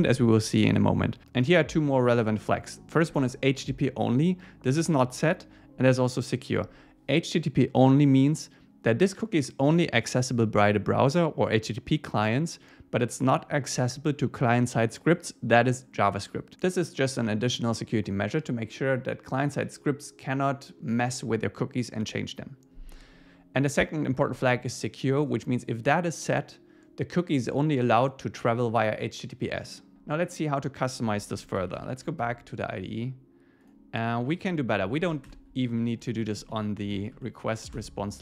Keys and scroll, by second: 32.2 Return, 35.0 shift+super+Left, 35.7 Up, 36.0 super+Right, 36.2 Left, 36.9 alt+shift+Left.